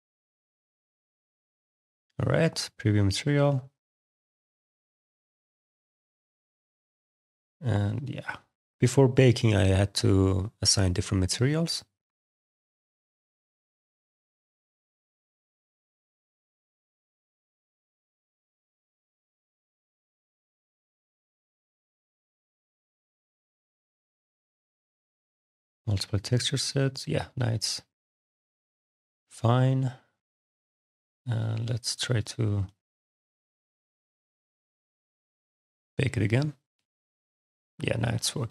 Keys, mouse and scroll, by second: 2.2 click, 12.3 alt+click, 13.3 click, 14.5 click, 15.0 click, 16.3 click, 20.6 click, 24.6 click, 35.3 click.